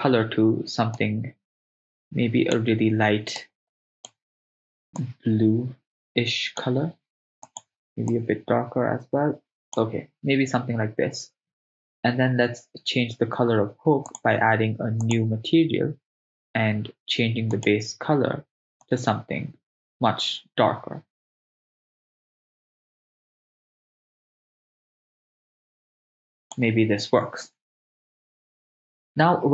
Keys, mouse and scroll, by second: 14.1-15.7 drag, 17.6-20.6 drag.